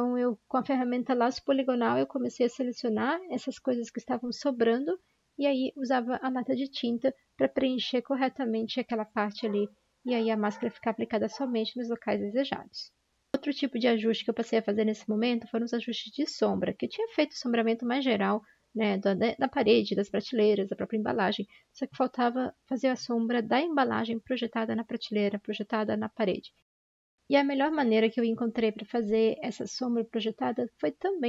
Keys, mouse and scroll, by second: 1.6-2.3 typing, 4.9 ctrl+d, 4.9 i, 14.9-17.3 typing, 22.2 ctrl+j, 22.2-22.5 typing.